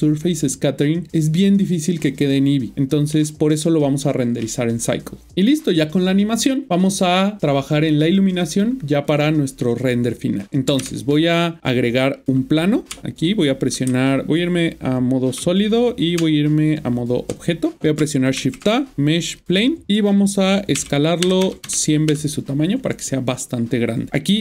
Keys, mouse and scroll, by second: 3.2 middle click, 10.7 space, 10.8 shift+Left, 11.9 scroll down 1, 12.4-12.9 scroll up 2, 13.9-15.3 typing, 16.2 Tab, 16.7 Tab, 18.0-18.4 typing, 19.4 click, 20.7 Left, 21.4 typing.